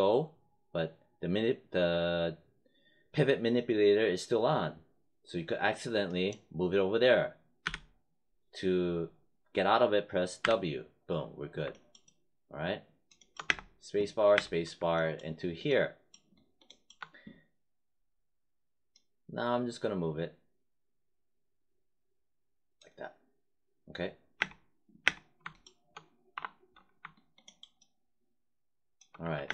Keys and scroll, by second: 7.5 z, 10.3 w, 13.4 space, 24.3 space, 26.3 5, 29.1 w, 29.4 space.